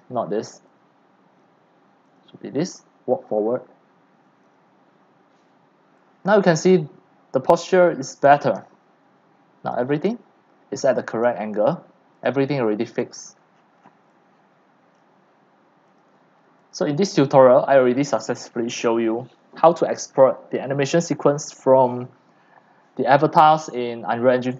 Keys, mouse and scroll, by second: 1.2 click, 1.7-2.9 drag, 3.5-5.8 drag, 6.0 click, 6.8-7.4 scroll up 5, 7.4 scroll down 5, 7.6 click, 8.1-9.7 typing, 9.8-10.9 drag, 11.9-12.9 drag, 13.3 click, 13.7 scroll down 10, 13.9 middle click, 13.9 scroll, 13.9 scroll, 14.0-24.5 typing, 15.0-16.7 drag, 18.9-21.8 drag.